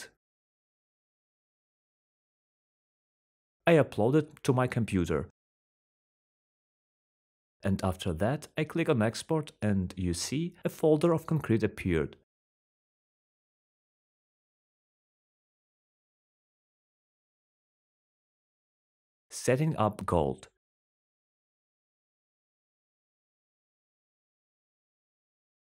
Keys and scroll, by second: 0.0-1.7 typing, 0.9 Return, 3.6-4.4 typing, 15.8-17.7 typing, 18.9 d, 21.9 typing, 23.5-25.0 typing.